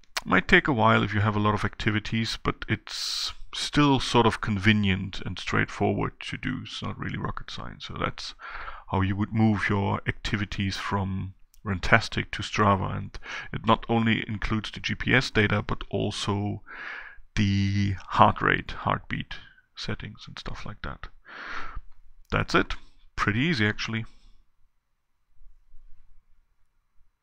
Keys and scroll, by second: 10.2 shift+Down.